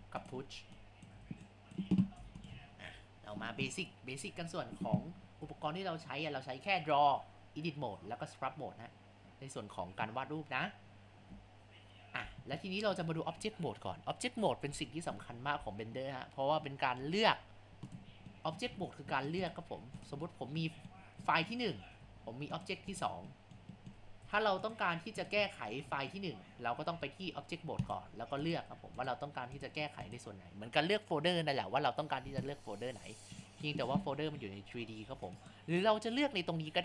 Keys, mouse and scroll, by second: 1.3 ctrl+z, 1.6 click, 2.0 ctrl+z, 2.2 Tab, 2.8 scroll down 3, 4.6 scroll up 2, 5.4 Tab, 18.9-19.3 middle drag, 19.5-20.6 middle drag, 21.8-23.3 middle drag, 24.2-25.2 middle drag.